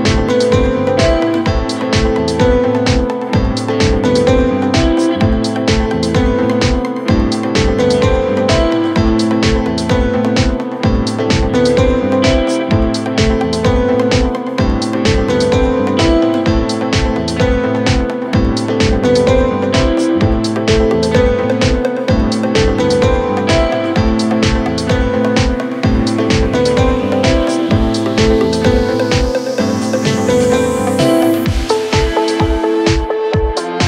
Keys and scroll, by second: 23.1 ], 23.9 ], 29.3 ctrl+d, 29.4 Escape, 30.1 ctrl+z.